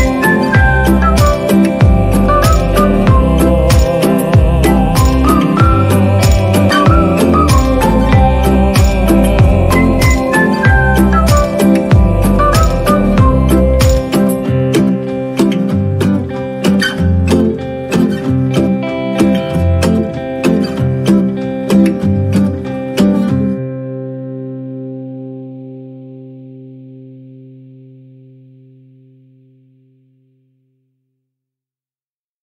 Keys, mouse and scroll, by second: 0.1 right click, 0.6 right click, 0.8 right click, 1.9 ctrl+-, 1.9 ctrl+=, 2.0 ctrl+-, 2.0 right click, 3.6 ctrl+=, 3.7 right click, 4.3 right click, 4.6 right click, 4.9 right click, 5.2 right click, 5.8 ctrl+-, 6.3 right click, 7.4 ctrl+=, 9.7 ctrl+-, 9.9 ctrl+-, 10.1 ctrl+=, 10.8 ctrl+-, 11.3 ctrl+-, 12.0 ctrl+=, 13.7 right click, 14.0 ctrl+-, 17.1 ctrl+-, 21.5 ctrl+=.